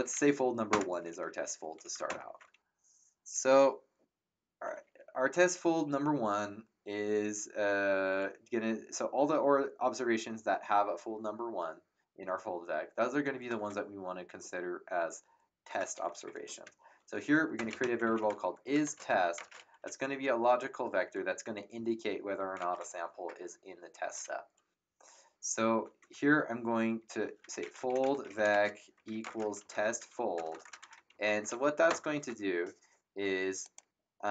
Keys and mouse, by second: 0.7 Return, 0.7 KP_Enter, 1.8 Up, 2.0 ctrl+Return, 17.4-19.3 typing, 27.1-31.6 typing, 31.8 Return, 31.8 KP_Enter, 33.6 click.